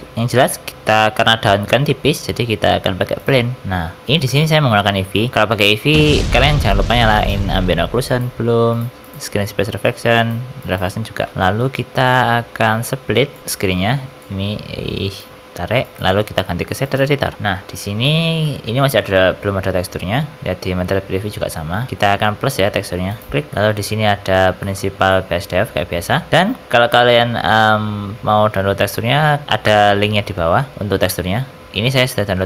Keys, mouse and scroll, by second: 1.9 shift+a, 3.6 shift+middle click, 3.6 scroll up 3, 3.9-4.9 scroll down 4, 8.4 click, 10.1 click, 11.3-12.4 scroll up 3, 13.3 click, 17.3 n, 17.6-18.3 scroll up 4, 18.0 shift+middle click, 18.4 middle click, 18.6 z, 20.4 z, 21.2 scroll down 4, 21.7-22.1 scroll up 1, 22.1 scroll down 1, 22.1 scroll down 2, 23.0 click, 23.5 middle click, 23.5-24.4 scroll up 8, 24.5 middle click, 25.0 middle click, 25.4-25.8 scroll up 2, 25.8-26.2 scroll down 6.